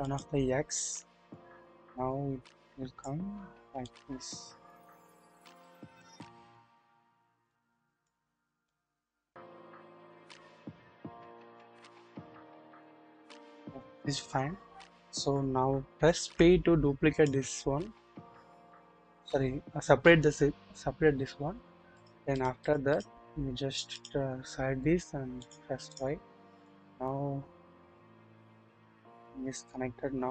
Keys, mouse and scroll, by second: 0.0 click, 1.3-3.1 drag, 3.9-6.6 drag, 7.5 click, 8.7-12.8 drag, 16.2 p, 18.6 click, 22.4 click, 25.4 click, 26.6-30.3 drag.